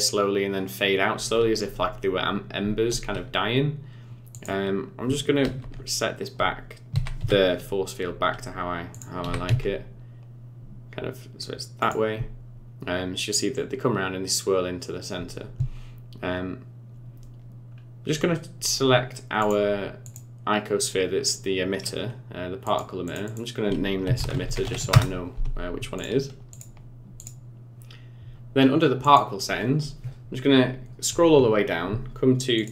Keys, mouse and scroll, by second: 4.3 click, 5.4 alt+r, 6.9 r, 9.2 r, 17.7-18.9 scroll up 1, 18.9-19.4 scroll down 3, 19.4 click, 20.0 click, 22.6 click, 23.0 click, 23.2 click, 24.4 t, 26.0 click, 26.5 click, 27.2 click, 29.0 click, 30.8-32.0 scroll down 18, 32.6 click.